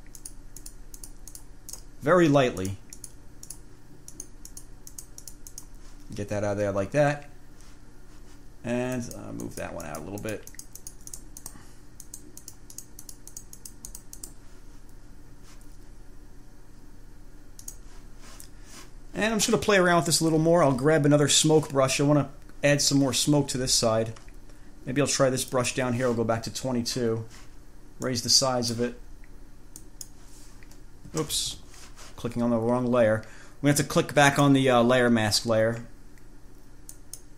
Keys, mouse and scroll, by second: 0.4 click, 2.0 click, 2.8 click, 3.2 click, 3.7 click, 4.4 click, 5.2-6.0 drag, 9.2 click, 12.2 click, 17.9 click, 20.5-21.6 scroll down 5, 23.8-24.2 scroll up 2, 24.4-24.8 scroll down 2, 25.2 scroll down 2, 25.8 click, 28.3 click, 30.0 click, 31.6 ctrl+z, 34.5 click, 37.1 click.